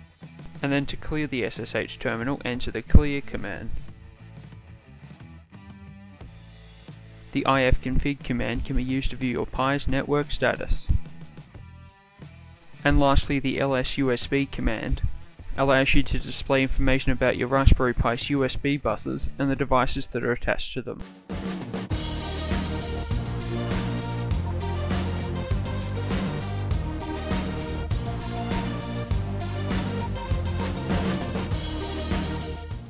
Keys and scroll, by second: 0.4 typing, 7.9 typing, 14.1 typing.